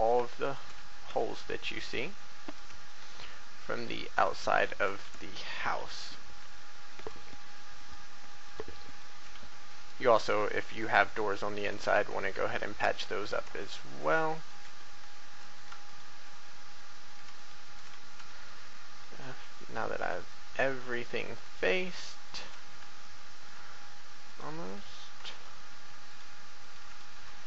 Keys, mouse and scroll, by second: 0.4 shift+right click, 0.8 shift+f, 1.2 shift+middle click, 2.4 right click, 2.8 shift+right click, 3.6 shift+right click, 4.2 shift+right click, 5.0 shift+f, 5.9 shift+middle click, 6.9 right click, 7.8 shift+right click, 8.4 shift+right click, 8.8 shift+right click, 10.2 right click, 11.0 shift+right click, 11.4 shift+right click, 11.8 shift+f, 12.2 shift+middle click, 13.2 right click, 13.6 shift+right click, 14.4 shift+right click, 15.5 right click, 15.8 shift+right click, 17.4 shift+right click, 17.9 shift+f, 18.6 shift+middle click, 19.6 right click, 21.2 shift+right click, 21.9 shift+right click, 22.2 shift+right click, 22.6 shift+f, 23.0 shift+middle click, 24.2 right click, 25.3 shift+right click, 26.0 shift+right click, 26.6 shift+right click, 27.0 shift+f.